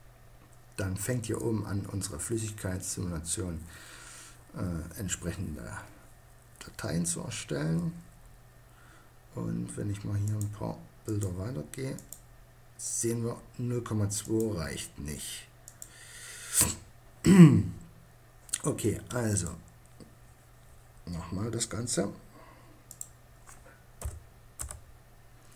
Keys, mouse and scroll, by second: 9.4-12.1 drag, 16.4-18.5 middle drag, 20.1-21.9 middle drag, 23.6 middle click.